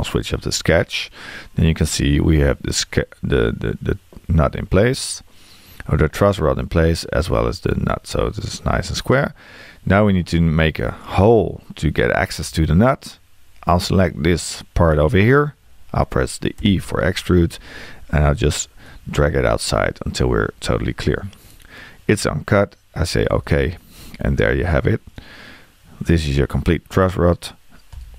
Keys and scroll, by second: 16.6 e.